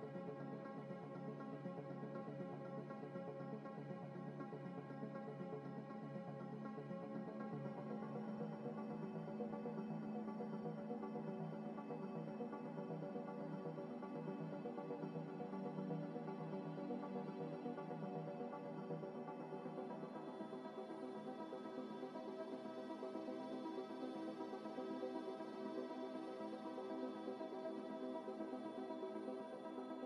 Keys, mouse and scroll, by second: 0.3 Tab, 0.5 middle click, 0.8 s, 1.4 ctrl+z, 2.4 middle click, 3.4 scroll up 1, 3.7 scroll down 1, 4.4 g, 4.5 x, 5.5 x, 6.8 Tab, 7.1 middle click, 8.8 Tab, 9.3 Tab, 9.7 ctrl+r, 11.5-11.9 scroll down 1, 11.9 3, 12.6 right click, 14.4 scroll up 1, 14.6 ctrl+r, 15.3 Escape, 15.7 right click, 18.1 ctrl+r, 22.6 ctrl+r, 24.3 scroll up 1, 24.7 ctrl+r, 26.9 ctrl+r, 28.4 scroll down 1, 28.6 3, 29.9 middle click.